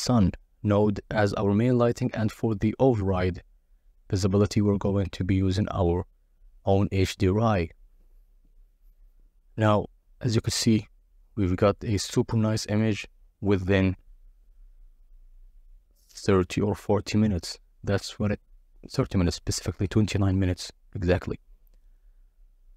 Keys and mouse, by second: 12.2 click, 16.1 click, 17.3-19.0 drag, 21.9-22.7 drag.